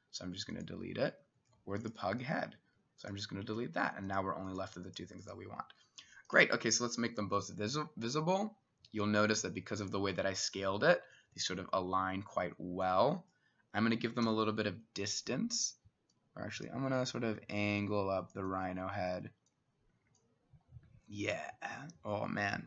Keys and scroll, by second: 14.3 t.